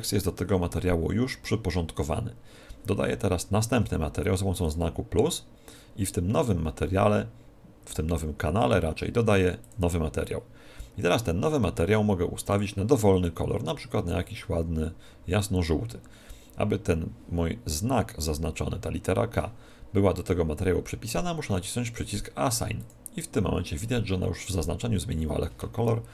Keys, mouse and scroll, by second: 4.6-6.5 drag, 9.6-11.5 drag, 12.4-14.4 drag, 22.8-24.7 drag.